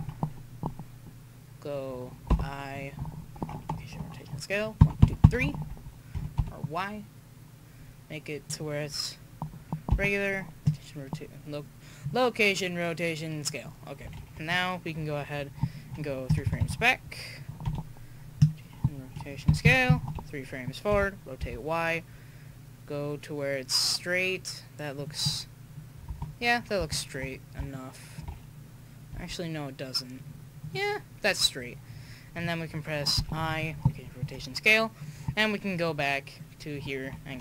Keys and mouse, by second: 4.8 Right, 5.0 Right, 6.1 r, 9.9 i, 13.4-15.0 drag, 16.2-16.6 Left, 19.5 Right, 19.6 Right, 20.9 r, 27.0 middle click, 29.2 r, 33.2 i, 34.9-37.4 right drag.